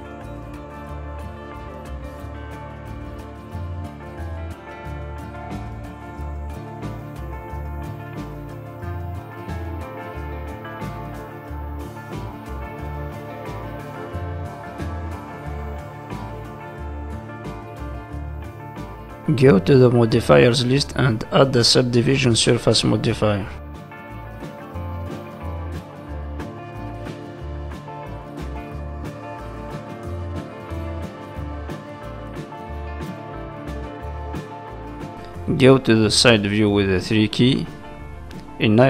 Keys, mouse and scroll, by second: 0.4 click, 0.7 middle click, 3.4 shift+click, 3.5 middle click, 4.7-5.3 scroll down 4, 5.1 shift+middle click, 5.3 middle click, 5.8-6.4 scroll up 5, 6.4 middle click, 7.0-7.4 scroll down 2, 8.1 shift+middle click, 8.1-8.5 scroll down 8, 8.5 middle click, 10.1 ctrl+s, 10.1 middle click, 10.7 middle click, 11.0 shift+middle click, 12.3 click, 12.7 click, 15.6 middle click, 17.0 Tab, 18.9 middle click, 18.9-19.9 scroll down 8, 18.9 shift+middle click, 19.9 shift+middle click, 20.7 scroll up 2, 20.9 middle click, 21.5 shift+middle click, 21.9 middle click, 22.4 scroll up 2, 22.7 middle click, 23.7 shift+middle click, 24.0 middle click, 25.1 scroll down 3, 25.4 shift+middle click, 25.6 middle click, 26.7 shift+middle click, 27.1-27.8 scroll up 6, 27.8 shift+middle click, 28.4-28.9 scroll up 1, 29.0 middle click, 29.7 shift+middle click, 30.5 middle click, 31.2-31.7 scroll up 1, 32.1 Tab, 32.3 middle click, 32.8-33.1 scroll up 2, 33.4 click, 34.4 middle click, 35.3 shift+middle click, 35.7 middle click, 36.6 KP_3, 37.6 shift+middle click, 38.0-38.8 scroll up 4, 38.3 shift+middle click.